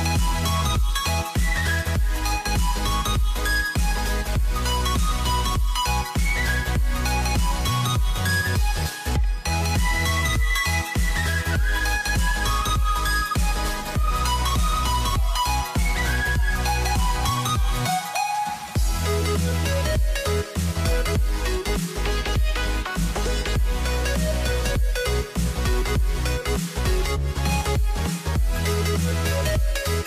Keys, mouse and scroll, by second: 0.5 ctrl+r, 2.2 s, 3.8 g, 5.5 ctrl+r, 8.9 c, 12.1 s, 13.7 ctrl+z, 15.2 s, 16.7 Tab, 18.3 a, 19.8 Tab, 21.4 ctrl+r, 24.4 Tab, 25.9 Tab, 27.4 shift+click, 29.0 c.